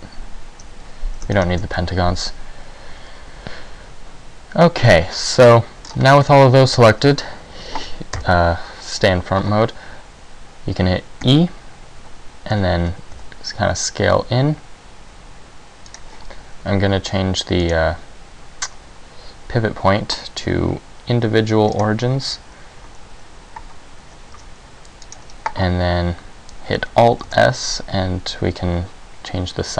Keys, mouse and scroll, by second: 1.4 shift+right click, 1.9 middle click, 6.0 scroll down 2, 6.4 middle click, 8.3 KP_1, 11.4 e, 13.4 s, 16.1 click, 17.7 click, 24.5 s, 25.3 click, 27.4 alt+s.